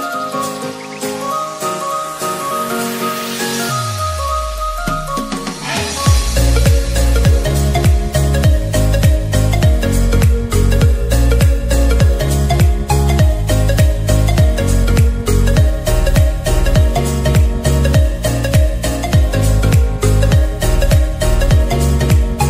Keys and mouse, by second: 0.4 click, 1.2 ctrl+z, 2.6-16.0 drag, 17.7-21.9 drag, 21.9-22.4 drag.